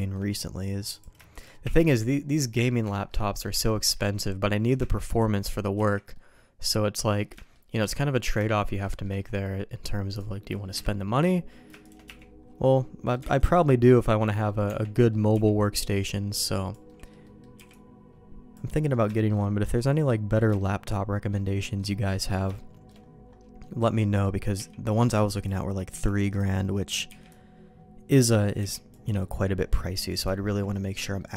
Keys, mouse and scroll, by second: 0.9 click, 1.3 click, 1.6 1, 2.3 click, 2.9 middle click, 3.2 middle click, 3.5 middle click, 5.0 shift+click, 5.7 1, 6.1 middle click, 7.0 middle click, 7.3 shift+middle click, 8.1 middle click, 8.4 shift+middle click, 8.8 shift+middle click, 10.1 click, 10.7 KP_Decimal, 11.8 shift+click, 12.0 1, 12.7 middle click, 13.3 alt+a, 13.4 middle click, 13.8 middle click, 14.6 Tab, 14.9 middle click, 15.3 b, 16.8 middle click, 17.2 middle click, 17.5 b, 18.7 middle click, 19.1 shift+middle click, 19.7 middle click, 20.5 shift+middle click, 21.4 middle click, 22.1 middle click, 22.5 shift+middle click, 23.5 middle click, 24.0 middle click, 24.5 b, 25.9 b, 26.5 middle click, 27.0 b, 28.5 b, 29.1 middle click, 29.9 middle click, 30.2 shift+middle click, 30.7 middle click, 31.1 middle click.